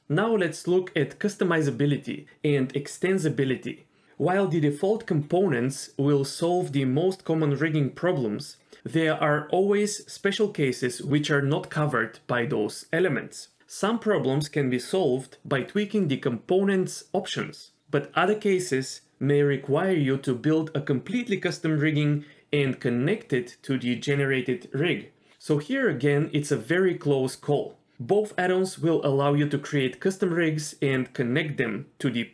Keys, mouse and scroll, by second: 0.2 scroll up 2, 0.3 shift+middle click, 0.5 g, 0.8 r, 1.2 s, 2.6 click, 2.7 g, 3.0 click, 3.1 g, 3.4 click, 3.8 g, 5.2 click, 5.3-7.4 typing, 6.7 click, 7.9 scroll down 3, 8.0 scroll up 1, 8.2 scroll down 1, 8.3 shift+middle click, 8.5 click, 8.7 g, 10.5 click, 11.5 click, 12.4 click, 12.4 g, 12.9 click, 12.9 g, 13.0 g, 13.8 click, 14.9 g, 15.3 click, 15.6 ctrl+z, 15.8 ctrl+z, 16.2 g, 16.5 click, 16.7 g, 16.9 ctrl+z, 17.2 click, 17.4 g, 17.6-18.0 scroll down 1, 22.0 click, 28.9 click, 29.5 click.